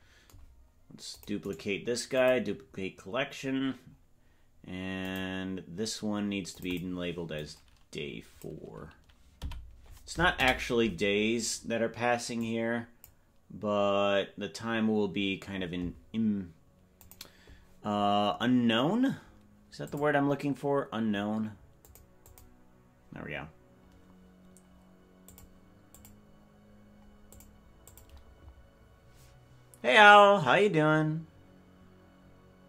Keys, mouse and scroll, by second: 1.1 click, 1.4-3.3 right drag, 3.3 scroll down 2, 3.4 scroll up 1, 3.5-3.8 scroll down 3, 3.8-5.0 scroll down 1, 5.0 click, 5.0 scroll down 1, 6.5 click, 6.7-11.2 drag, 12.3 click.